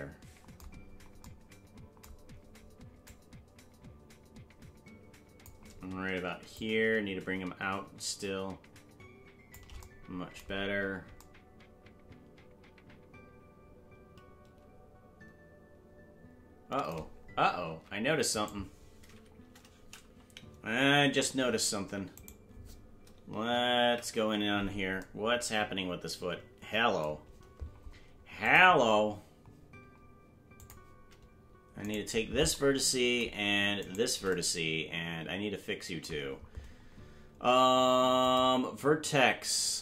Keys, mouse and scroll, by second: 0.8-1.2 scroll down 3, 3.1-5.4 drag, 6.5-9.5 shift+drag, 10.6-11.2 scroll down 1, 18.4 ctrl+Tab, 18.4 right click, 20.9 Tab, 22.1 right click, 23.3 KP_Enter, 23.8 KP_Decimal, 28.4-29.5 drag, 30.6 click, 31.8 right click, 33.8 shift+right click, 38.2-39.8 drag.